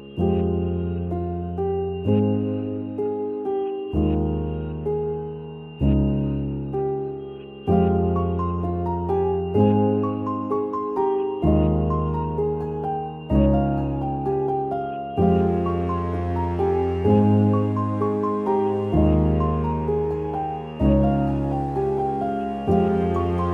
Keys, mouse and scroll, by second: 0.0-0.9 typing, 2.1 Left, 5.6-13.1 drag, 15.6 scroll up 1, 16.7 click, 17.7 right click, 18.7 click, 20.7 right click, 21.4 click.